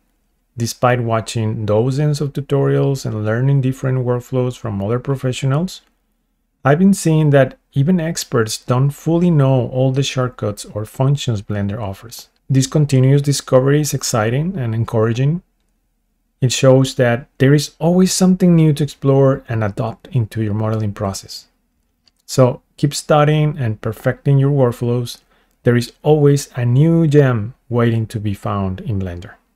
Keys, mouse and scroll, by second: 0.1 click, 1.6-4.5 drag, 4.5-7.2 shift+middle drag, 9.2 shift+middle click, 15.3 click, 19.1 scroll down 1, 19.5 shift+middle click, 20.3 scroll up 1, 21.4 scroll down 1, 21.8 shift+middle click, 22.5 middle click, 22.6 click, 23.7 super+F2, 27.3 click, 27.5 click, 27.7 click, 27.9 shift+click, 28.5 right click, 28.9 click.